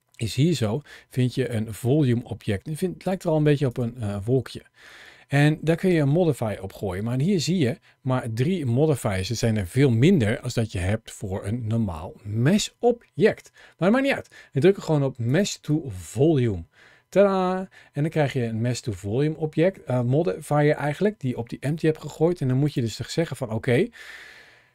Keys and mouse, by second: 2.9 click, 3.5 click, 5.6-15.2 drag, 22.5 click.